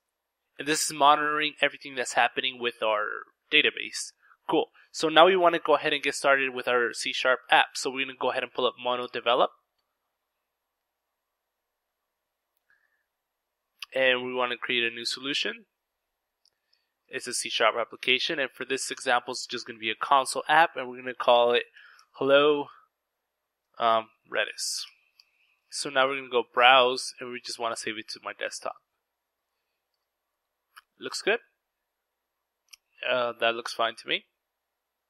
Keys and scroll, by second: 0.1 Return, 6.1 ctrl+`, 8.2-9.1 typing, 9.1 Return, 11.2 typing, 21.8-25.6 typing.